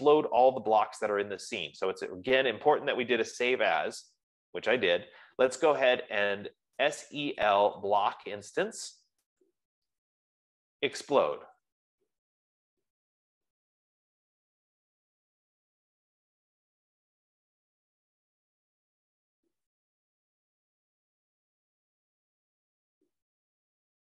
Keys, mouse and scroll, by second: 6.9-8.8 typing, 9.8 Return, 10.7-12.5 typing, 12.7 Return, 23.1 F15.